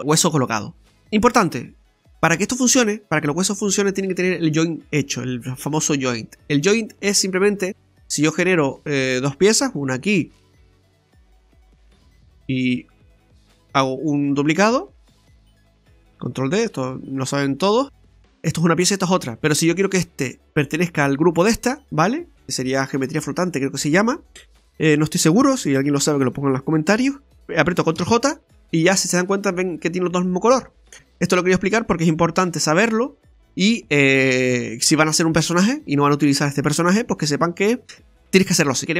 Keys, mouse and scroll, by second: 0.0 middle click, 0.0-0.3 scroll down 1, 1.0-1.4 scroll up 4, 6.3 middle click, 8.0-8.7 scroll down 4, 8.7 click, 9.7 shift+a, 12.8 shift+a, 14.2 ctrl+d, 15.4 click, 16.4 shift+d, 17.4 middle click, 18.7 middle click, 18.7 right click, 19.0 right click, 20.3 right click, 21.3 right click, 22.0 shift+right click, 28.0 ctrl+j, 30.9 Tab, 30.9 middle click, 30.9-31.2 scroll down 3, 32.8 x, 34.6-36.2 scroll up 3, 37.9-38.6 scroll up 1, 38.6 shift+middle click.